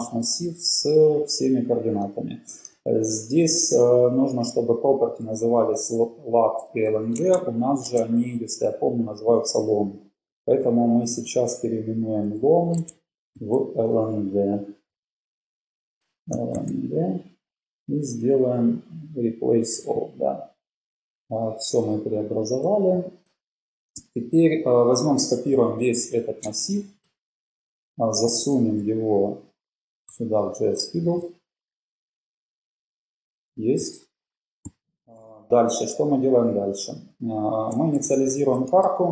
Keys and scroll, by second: 7.0 Left, 7.3 super+Tab, 7.8 super+Tab, 10.6 super+h, 12.0-13.4 typing, 14.5-17.1 typing, 23.4 Page_Down, 24.1 BackSpace, 24.8 Page_Up, 24.8 BackSpace, 25.3 super+a, 25.7 super+c, 26.6 super+Tab, 34.8 Up, 35.4 Down, 36.0 Down, 36.7 Up, 37.9 shift+super+Right, 38.5 shift+super+Left.